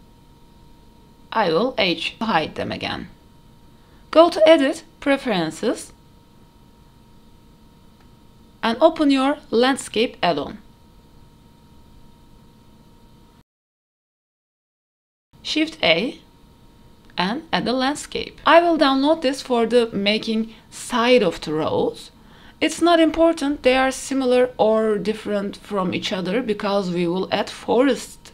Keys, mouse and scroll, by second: 0.0 shift+middle click, 0.2-0.8 drag, 1.9 h, 2.6 shift+middle drag, 3.2 scroll up 1, 3.5 shift+middle drag, 4.9-6.0 drag, 15.1 shift+a, 18.2-20.0 scroll up 6, 20.0 click, 20.5 shift+middle click, 21.2-21.9 scroll up 1, 23.5 click, 24.3 click, 25.5 click, 26.1-27.3 drag, 28.0-28.3 drag.